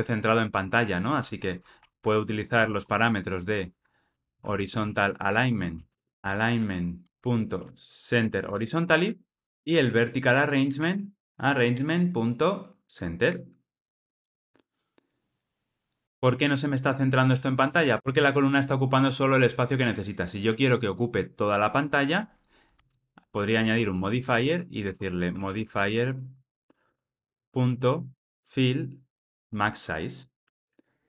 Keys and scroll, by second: 5.2 Return, 6.1 ctrl+alt+o, 7.1 Return, 10.3 Return, 11.5 Return, 24.8 Return, 30.1 Return.